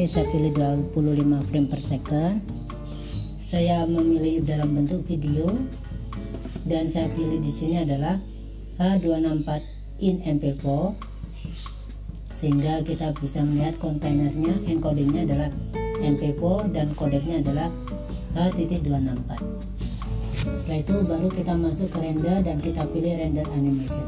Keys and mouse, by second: 3.6-5.6 drag, 7.0-11.7 drag, 12.3 click, 22.1-23.9 drag.